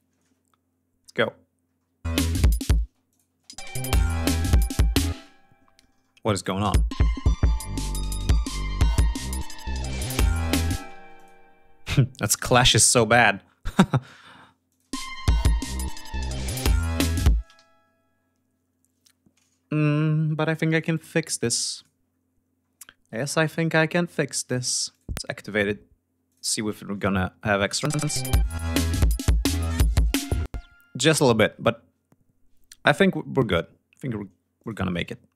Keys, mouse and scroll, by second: 1.4 scroll down 2, 1.8 space, 2.6 space, 2.8 click, 3.3-4.1 scroll down 4, 4.3-4.9 ctrl+scroll up 4, 4.9 ctrl+space, 6.1 click, 6.3 space, 6.4-6.7 scroll down 1, 7.2 scroll up 1, 8.9 scroll up 1, 10.6 space, 10.8 d, 10.9 click, 12.9 click, 14.4 click, 14.6 space, 17.1 space, 17.3 g, 17.6-18.4 scroll up 4, 18.4-19.0 ctrl+scroll down 4, 19.4-19.9 ctrl+scroll down 5, 20.5 click, 21.5 click, 21.9-22.3 scroll up 2, 22.9 right click, 24.7 click, 26.0 click, 27.6 space, 29.3 ctrl+scroll down 2, 29.7 ctrl+scroll up 2, 30.0 ctrl+space, 34.1 click, 34.9 click.